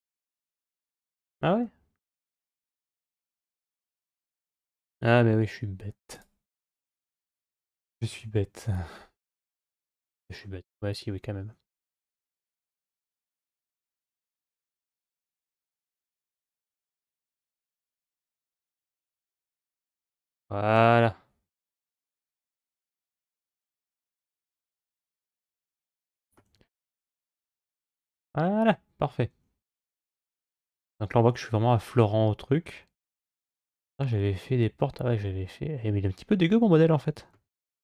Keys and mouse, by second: 1.4-2.6 middle drag, 7.9 Tab, 13.7 KP_Divide, 15.6-16.8 middle drag, 18.6 KP_Divide, 21.5 KP_7.